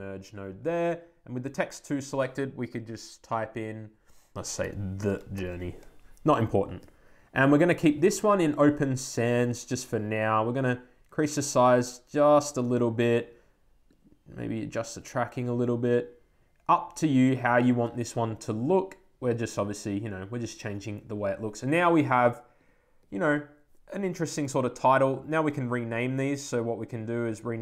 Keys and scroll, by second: 4.9 shift+BackSpace.